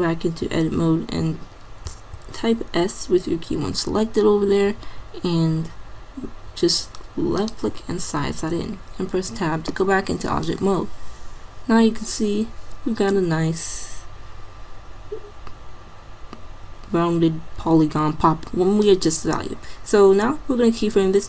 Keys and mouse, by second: 1.9 s, 8.3 Tab, 10.5-12.3 drag.